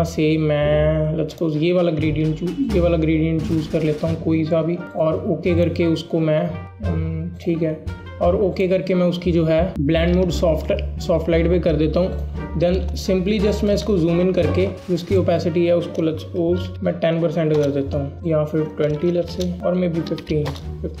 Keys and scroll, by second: 13.7 Return, 16.7 BackSpace, 17.6 Return, 19.2-20.2 typing.